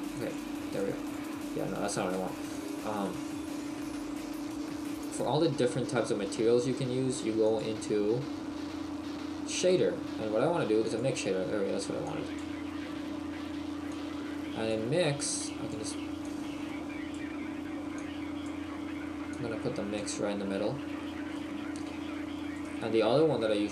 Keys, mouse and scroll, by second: 1.9 click, 2.6 click, 3.3 KP_4, 3.9 Delete, 5.4 click, 7.7 click, 12.1 click, 13.1-13.9 scroll down 4, 13.9 click, 13.9-14.3 scroll down 1, 20.0 click, 20.8-21.5 scroll up 4, 21.5 shift+middle click, 22.5 right click.